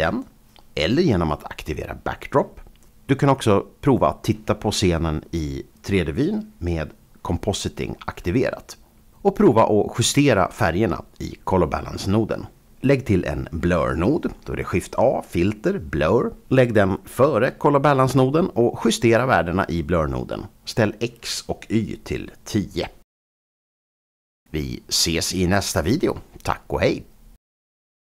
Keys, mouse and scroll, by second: 0.6 click, 1.6 click, 1.9 click, 9.8 click, 10.2 click, 10.6 click, 13.4 shift+a, 15.2 click, 17.2 click, 18.8-19.4 scroll up 4, 19.4 click, 20.3 KP_0, 20.9 Return, 22.5 Home.